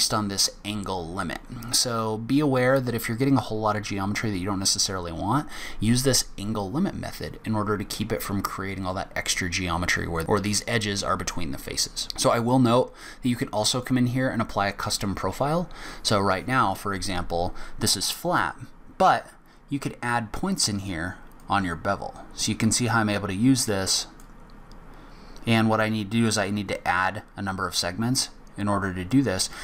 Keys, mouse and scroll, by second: 13.0-13.7 scroll down 4, 13.7 click, 14.4-16.2 scroll down 10, 19.2 click, 21.3 click, 23.6 click, 24.6-25.5 scroll up 3, 26.4 click, 29.5 middle click.